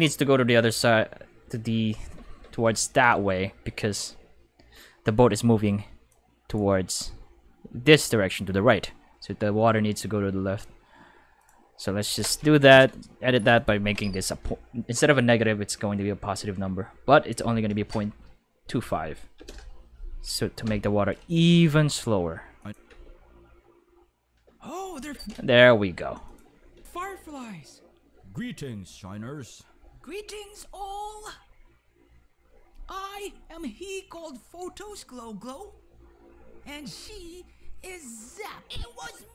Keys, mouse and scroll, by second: 6.1-6.5 shift+drag, 11.4 click, 13.5 click, 13.5 right click, 17.3 ., 17.8 2, 19.3 5, 19.4 Return, 20.6 i, 22.6 click, 22.9 space, 25.1 space, 26.2 click, 26.7 space.